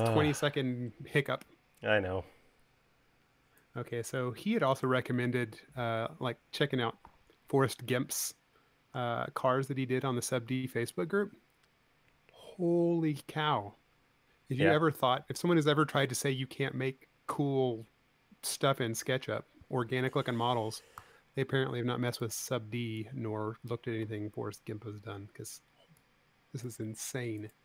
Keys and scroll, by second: 21.5 v.